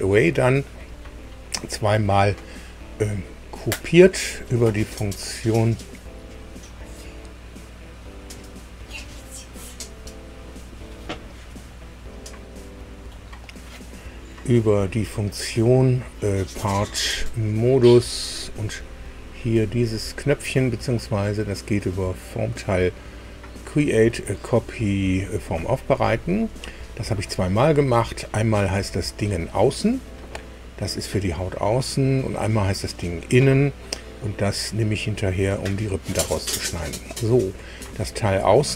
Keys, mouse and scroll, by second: 5.0 click, 9.5 click, 13.3 click, 15.7 click, 17.8 click, 21.9 click, 24.0 click, 26.1 Escape.